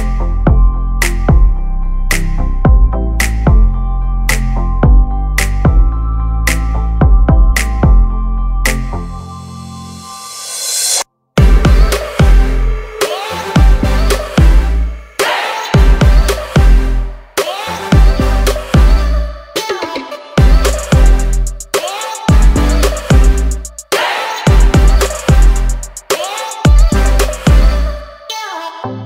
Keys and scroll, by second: 2.4 r, 3.5 p, 9.1 space, 10.3 m, 10.8 Up, 11.5-12.8 typing, 17.0 l, 18.2 1, 18.5 0, 18.9 Return, 25.7 space, 27.0 s.